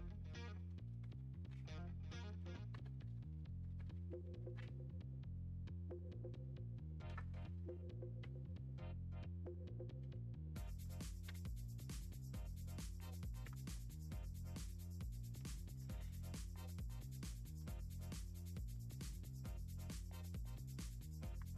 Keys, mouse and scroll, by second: 0.9 ctrl+shift+z, 1.1 ctrl+shift+z, 1.4 ctrl+shift+z, 1.7 click, 2.3 click, 2.7 ctrl+shift+z, 3.0 ctrl+shift+z, 4.2 ctrl+shift+click, 4.3 ctrl+shift+z, 4.5 ctrl+shift+z, 7.1 click, 7.4 click, 10.1 click, 11.3 ctrl+v, 13.5 Return, 15.2 click, 16.4 1, 17.6 4, 18.7 Delete, 20.0 click, 21.4 5.